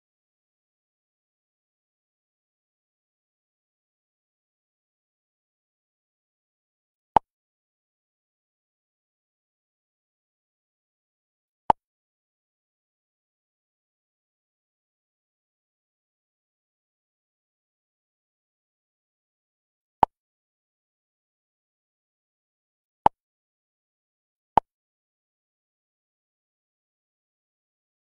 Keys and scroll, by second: 26.6 ctrl+c.